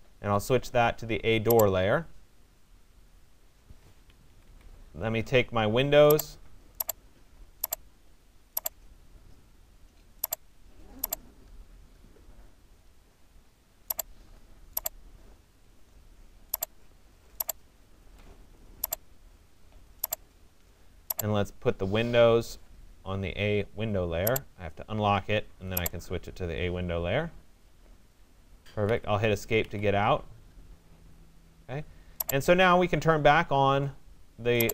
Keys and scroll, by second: 3.8 Escape, 28.4 Escape.